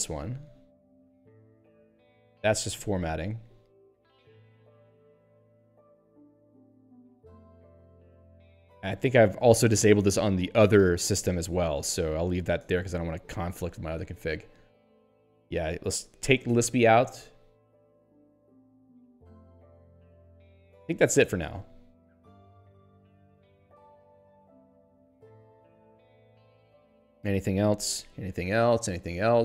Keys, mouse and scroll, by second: 3.8 n, 7.5 p, 11.4 n, 12.6 Tab, 13.2 n, 17.0 s, 19.6 n, 21.4 Tab, 22.3 n, 22.4 Tab, 23.1 n, 23.2 Tab, 25.0 n, 28.7 p.